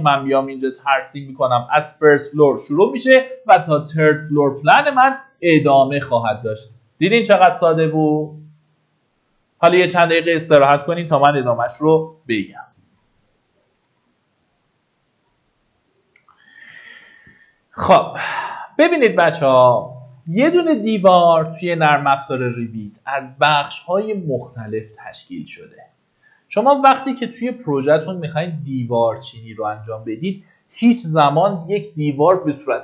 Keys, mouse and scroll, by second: 0.9 click, 3.5 Escape, 4.4 click, 12.6 F10, 12.7-32.8 drag.